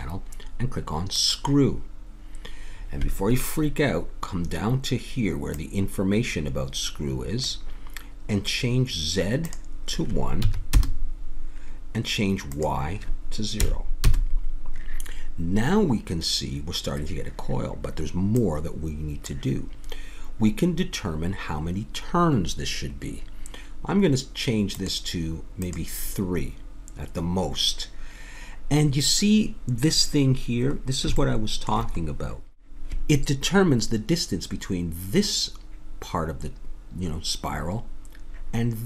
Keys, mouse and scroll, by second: 1.2-3.4 drag, 5.5-7.4 drag, 9.5-11.5 drag, 12.5-14.4 drag, 18.6-20.2 drag, 24.8-27.6 drag, 30.0 click, 30.7 middle click, 31.5-35.0 middle drag.